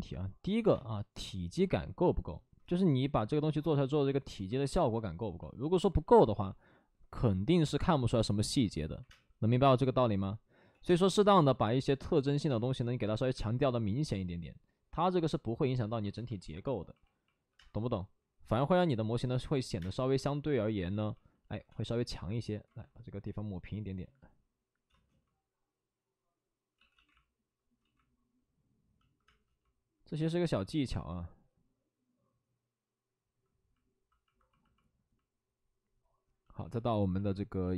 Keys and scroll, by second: 0.6 space, 9.0 3, 9.0 space, 10.6 ctrl+z, 10.8 space, 12.4 space, 17.4 2, 17.5 space, 19.7 2, 19.7 space, 21.4 ctrl+z, 21.6 space, 22.6 ctrl+z, 24.8 space, 26.7 ctrl+z, 27.7 ctrl+z, 29.2 space, 30.1 ctrl+z, 33.5 ctrl+z, 35.7 ctrl+z.